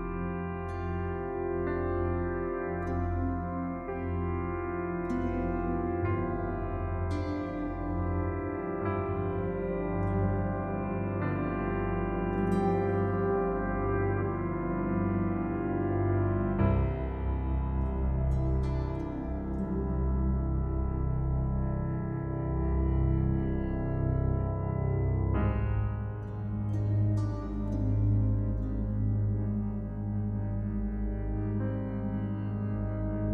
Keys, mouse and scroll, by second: 0.9 click, 3.3-4.2 scroll up 1, 4.2-4.8 scroll down 1, 4.8 scroll up 1, 5.3 scroll down 1, 7.0-8.9 scroll up 1, 8.9 click, 20.9-22.4 typing, 22.9 click, 28.4-29.3 scroll down 1, 29.3 click, 32.5 Return, 33.1-33.3 scroll up 1.